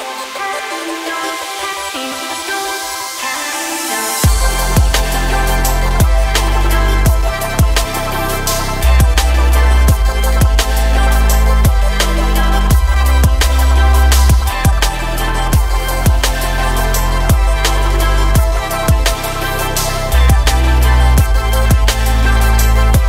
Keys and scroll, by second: 16.1 KP_1, 18.6 g, 19.2 x, 22.0 s.